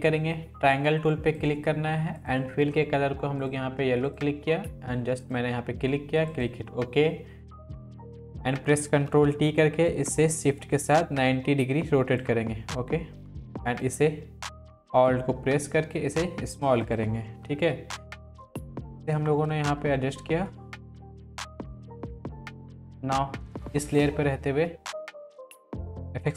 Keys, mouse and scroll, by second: 9.1 ctrl+t, 9.9-12.7 drag, 12.7-13.9 drag, 17.4 Left, 19.5 Left, 21.5 ctrl+t, 21.7 click, 22.0 Up, 22.1 Left, 22.4 click, 23.9 click.